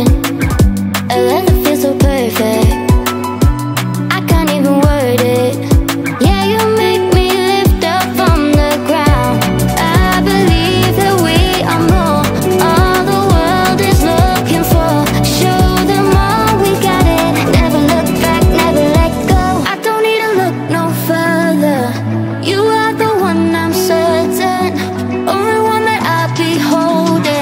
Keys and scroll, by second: 15.8 space.